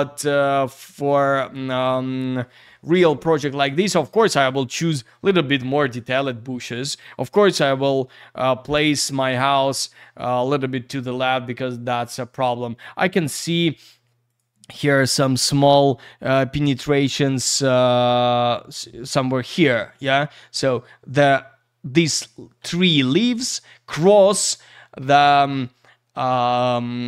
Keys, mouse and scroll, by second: 12.7 scroll up 1, 14.3 click, 14.3 click, 15.3-16.6 scroll up 1.